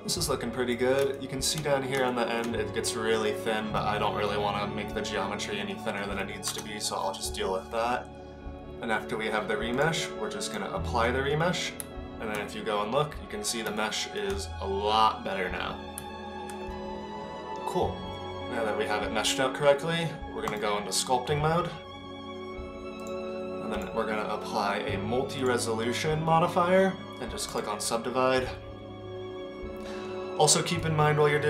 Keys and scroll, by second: 6.5 KP_0, 11.8 Tab, 16.0 Tab.